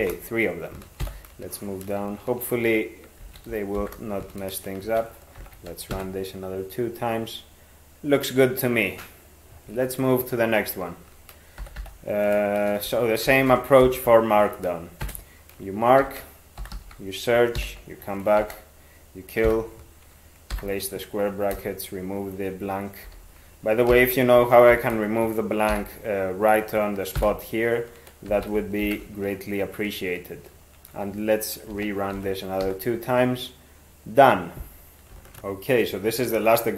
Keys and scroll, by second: 0.0-0.5 typing, 1.0 ctrl+n, 3.6 ctrl+x, 3.8 ), 4.9 ctrl+2, 5.4 ctrl+x, 6.0 e, 11.6 ctrl+n, 11.8 ctrl+n, 13.3 ctrl+x, 13.8 (, 15.0 ctrl+space, 16.0 ctrl+s, 16.4-17.3 typing, 17.6 alt+b, 18.4 ctrl+w, 19.5 [, 20.6 ctrl+y, 21.6 BackSpace, 23.1 ctrl+f, 23.9 ctrl+k, 24.8 (, 25.7 ctrl+y, 27.2 ctrl+n, 28.3 ctrl+x, 28.8 ), 31.8 ctrl+2, 32.2 ctrl+x, 32.6 e.